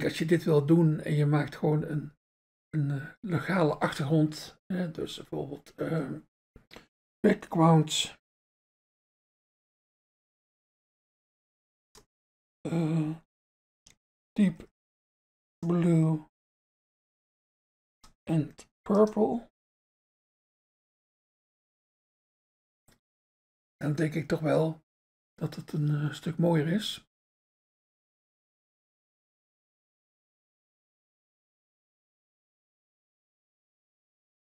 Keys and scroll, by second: 7.4-12.0 typing, 14.1-22.3 typing.